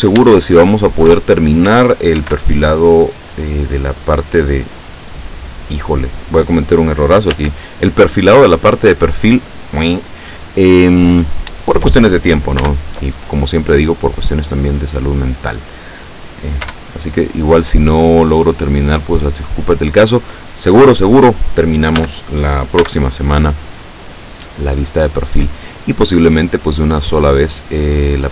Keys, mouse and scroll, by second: 0.5 shift+middle click, 2.3 ctrl+r, 4.8 click, 5.9 click, 7.4 a, 12.6 b, 13.6-15.4 drag, 16.7 e, 20.0 click, 22.0 a, 22.8 b, 23.1 click, 24.3-28.1 drag.